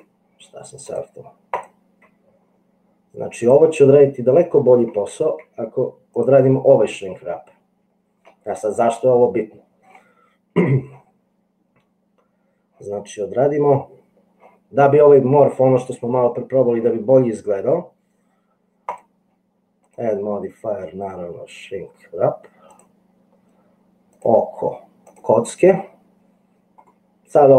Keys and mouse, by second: 0.9 click, 2.3 g, 4.4 middle click, 5.5 g, 6.9-8.4 middle drag, 18.9 middle click, 20.1 middle click, 20.8-22.9 drag, 24.3 click, 27.1 middle click.